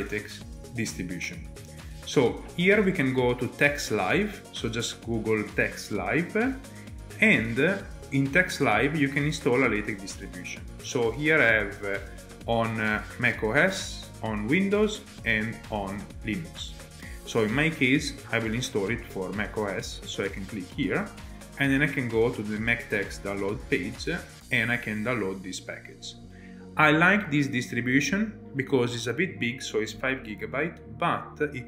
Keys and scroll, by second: 1.7 ctrl+Tab.